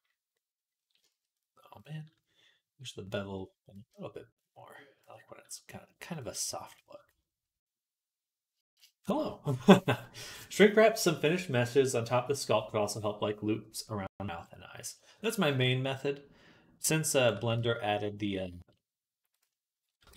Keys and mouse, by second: 3.6-6.0 shift+drag, 6.0 middle click, 6.5 shift+click, 6.6-8.5 shift+middle drag, 8.5 click, 8.7-15.6 middle drag, 15.6-20.1 shift+drag, 17.4 ctrl+z.